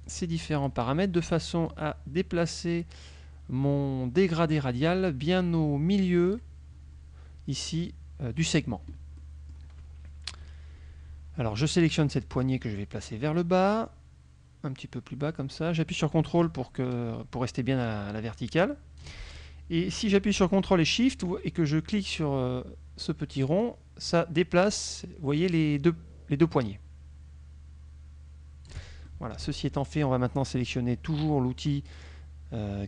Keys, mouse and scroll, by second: 1.7-6.6 drag, 9.3 click, 10.4 KP_Subtract, 12.5-19.3 drag, 23.7-29.0 ctrl+shift+drag, 29.2 ctrl+shift+click, 31.8 click.